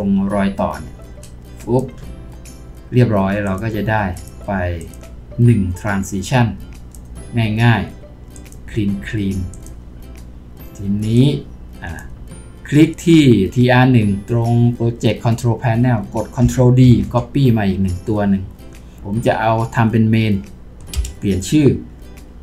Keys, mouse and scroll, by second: 16.9 ctrl+d, 21.0 Return.